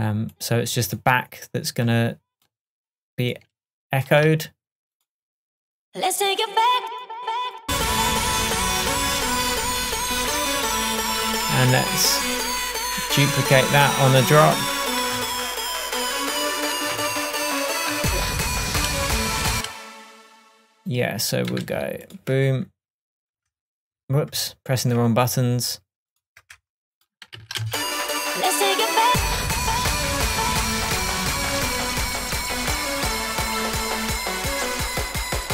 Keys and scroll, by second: 25.5 F12, 33.6 Tab.